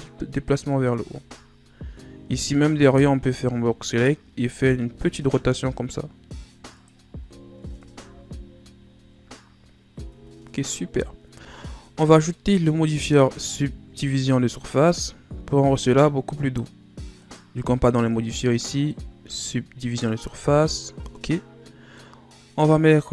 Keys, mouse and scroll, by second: 1.0-1.8 ctrl+scroll up 1, 1.8 z, 2.4 right click, 2.8 b, 4.8 r, 7.0 z, 7.6 Tab, 8.0 a, 8.9 ctrl+scroll down 1, 10.1 Tab, 11.3 Tab, 11.6 scroll down 1, 11.8-12.5 middle drag, 12.5-12.9 scroll up 3, 12.9 right click, 17.2 click, 18.8 click, 19.5 scroll down 4, 19.8-22.9 middle drag.